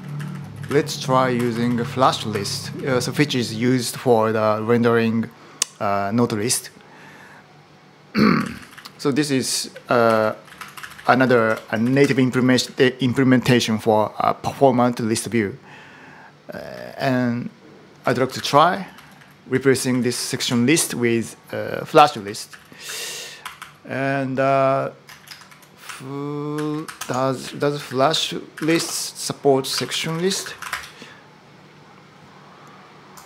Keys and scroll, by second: 0.0-2.5 typing, 7.9-12.9 typing, 16.3-20.2 typing, 20.2 super+v, 21.7 Return, 22.0-23.4 typing, 25.0 ctrl+shift+super+m, 25.3 super+t, 25.6-31.0 typing.